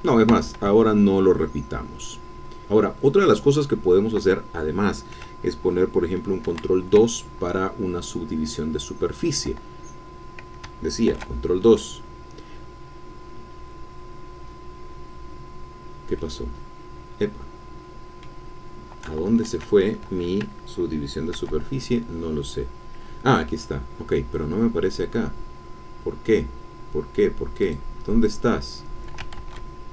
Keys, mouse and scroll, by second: 0.3 Escape, 1.4-1.9 scroll down 2, 6.8 ctrl+2, 8.8-9.2 scroll down 2, 9.8-10.2 scroll down 2, 10.2-10.6 scroll up 2, 11.1 ctrl+2, 11.8-12.3 scroll down 1, 13.8-14.3 scroll down 1, 15.3 scroll down 1, 16.1-17.8 drag, 17.8-18.7 scroll down 2, 19.2 ctrl+z, 21.3 ctrl+2, 25.6-27.6 scroll down 2, 27.6 click, 29.3 ctrl+z.